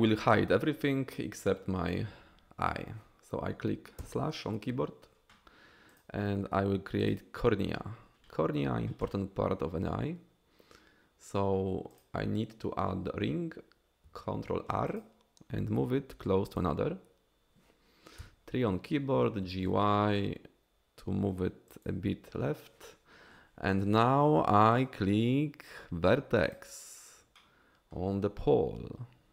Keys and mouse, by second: 4.1 KP_Divide, 5.9-7.1 drag, 12.0 click, 14.0 ctrl+r, 16.5 click, 18.2 KP_3, 19.5 g, 19.6 y, 21.7 click, 25.1-25.7 drag, 25.1-25.7 middle drag, 25.1-25.7 right drag, 27.4 click, 27.4 middle click, 27.4 right click.